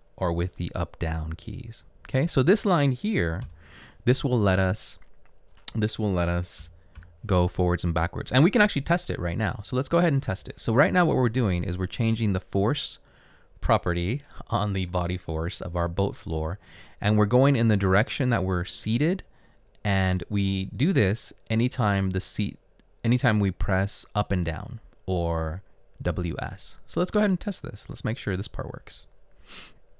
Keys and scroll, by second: 3.6 Return, 6.7 BackSpace.